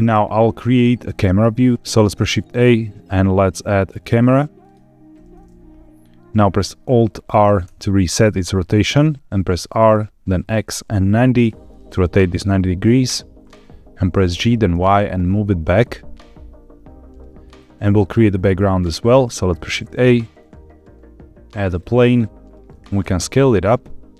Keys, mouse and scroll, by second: 1.9 shift+a, 7.6 alt+r, 9.7 r, 10.4 x, 11.2 KP_9, 11.3 KP_0, 13.0 KP_Enter, 14.2 g, 14.6 y, 17.4 click, 18.2 shift+middle drag, 18.8 scroll down 1, 19.3 shift+a, 22.9 s.